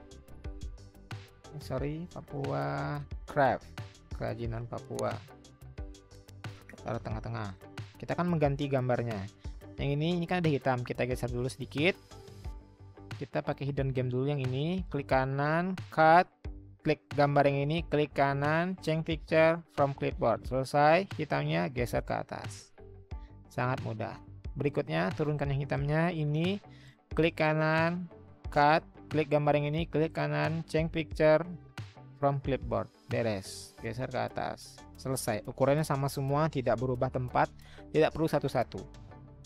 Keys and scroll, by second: 1.0-3.6 typing, 5.4-6.3 Right.